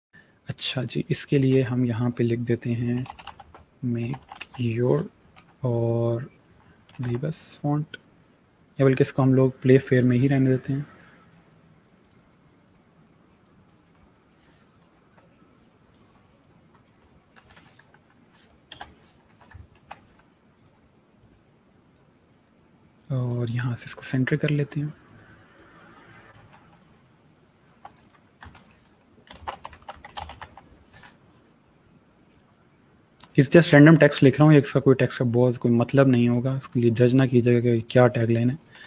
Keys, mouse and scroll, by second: 1.0 ctrl+a, 2.3-4.5 typing, 5.2 ctrl+a, 5.8 click, 6.4-7.4 typing, 8.6 click, 10.4 click, 11.9 click, 14.8 shift+m, 15.5 click, 17.2 shift+r, 19.6 shift+y, 20.4 click, 28.4 ctrl+a, 28.9-30.8 typing, 32.3 click, 38.8 space.